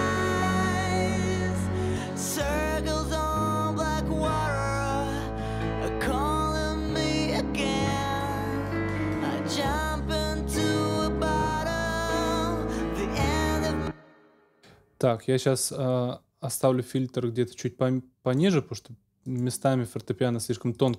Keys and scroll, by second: 10.8 Up, 13.5 ctrl+space.